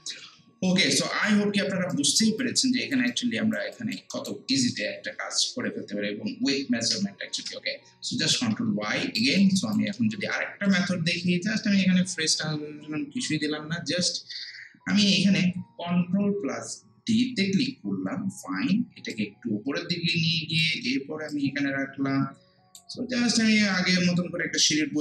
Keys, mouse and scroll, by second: 1.2 scroll down 1, 1.9 alt+right click, 2.4 alt+click, 3.7 alt+click, 4.1 alt+right click, 4.5 alt+middle click, 5.2 ctrl+z, 7.3 ctrl+shift+z, 8.7 scroll down 1, 9.0 scroll up 1, 9.2 alt+click, 9.6 alt+right click, 9.9 alt+middle click, 10.7 click, 15.9 click, 17.4 ctrl+d, 19.1-25.0 drag.